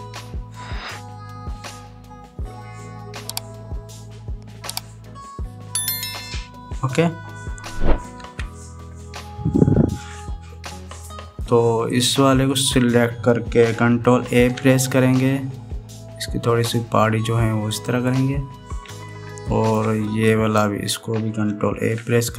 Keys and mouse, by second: 0.0 g, 8.9 KP_1, 12.9 click, 15.1 ctrl+a, 19.9 shift+middle click, 21.2 click.